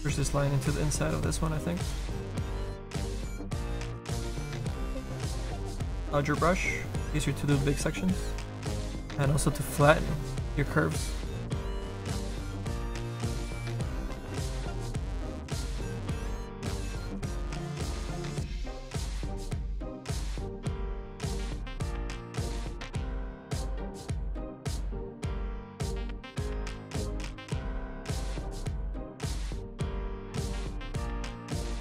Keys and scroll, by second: 4.6 s, 5.0 s, 5.4 s.